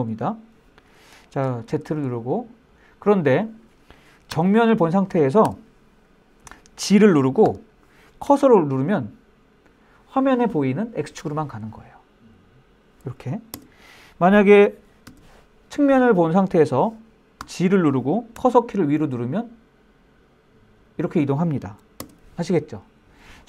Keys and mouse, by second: 1.3 super+z, 2.6-3.3 middle drag, 3.9 KP_1, 4.0 KP_2, 5.1 KP_1, 7.1 g, 7.9 Right, 8.1-13.2 Right, 13.2 Return, 14.7 KP_3, 17.0 g, 18.0-21.4 Up, 21.6 KP_Enter.